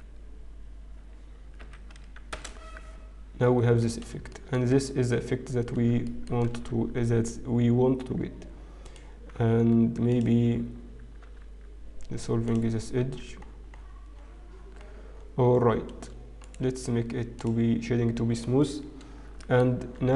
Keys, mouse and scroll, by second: 3.5 Tab, 3.5-4.1 scroll down 4, 4.1-6.1 scroll down 5, 6.1 shift+middle click, 6.1-7.9 scroll up 9, 8.5 Tab, 8.5-8.9 scroll up 2, 8.9 click, 10.5 alt+click, 11.8 x, 14.5 Tab, 14.5-15.9 scroll down 11, 15.9-16.7 scroll down 1, 16.7 right click, 19.3 shift+middle click.